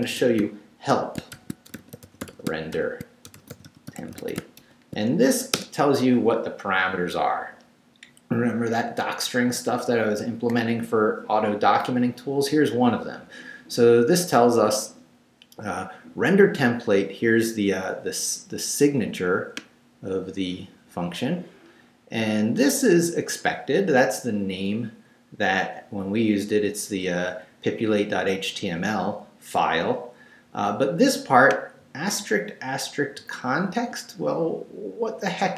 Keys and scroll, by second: 0.0-5.1 typing, 5.5 shift+Return.